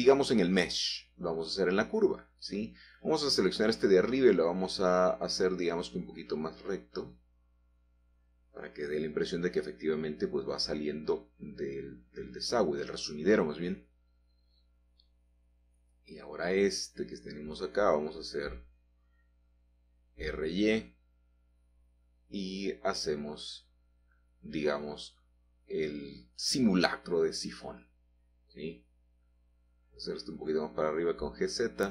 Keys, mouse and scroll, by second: 0.5 o, 1.1 g, 1.6 x, 3.6 click, 4.6-5.6 drag, 6.3 r, 13.9 ctrl+click, 16.5 click, 18.3 r, 18.6 x, 19.4 Escape, 21.0 r, 21.3 y, 25.6 ctrl+click, 29.4 g, 30.1 z, 31.6 click.